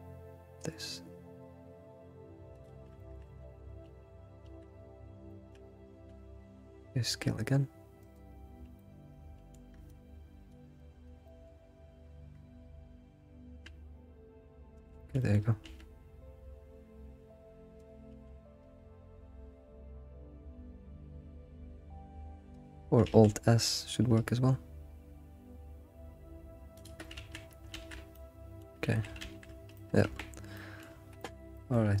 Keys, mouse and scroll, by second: 3.0 shift+middle click, 3.4 ctrl+z, 4.4 ctrl+shift+z, 5.3 shift+middle click, 5.4 ctrl+shift+z, 5.9 ctrl+z, 8.3 s, 8.4-8.7 scroll down 4, 8.7-10.5 middle drag, 11.1 ctrl+click, 11.4 middle click, 11.7-12.1 scroll up 3, 15.2 alt+middle click, 15.4 alt+scroll up 1, 15.6 s, 18.1 s, 23.0 alt+s, 27.2 ctrl+z, 27.7 ctrl+shift+z, 28.1 middle click, 28.9 ctrl+z, 29.7 middle click, 30.2 Tab, 30.6-32.0 middle drag.